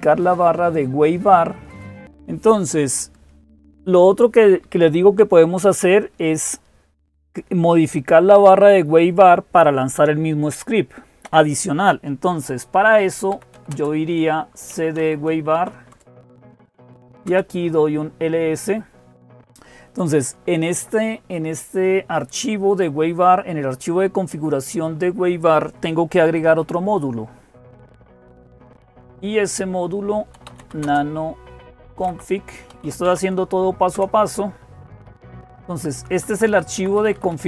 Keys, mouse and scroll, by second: 2.0 typing, 12.9-17.2 typing, 29.9-33.7 typing, 33.7 Tab, 33.7 Return, 35.1 Down, 35.3 Down, 35.5 Down, 35.7 Down, 35.9 Down, 36.3 Down, 36.5 Up, 36.7 Up, 36.9 Up, 37.1 Up, 37.3 Up.